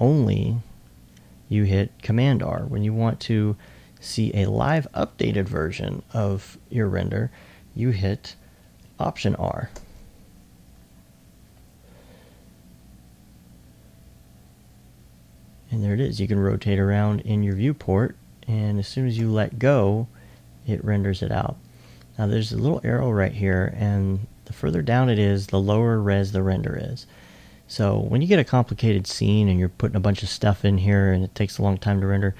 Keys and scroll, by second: 17.3 alt+s.